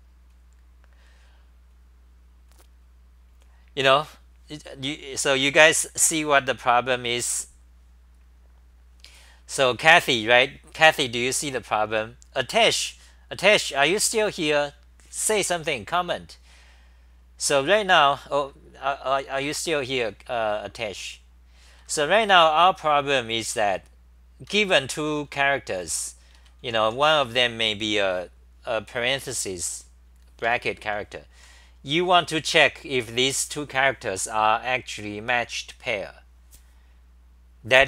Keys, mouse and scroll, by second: 17.6-18.4 scroll down 1, 21.9 ctrl+g, 23.5 ctrl+g, 25.6-27.3 typing, 29.3 super+=, 31.1-31.8 typing.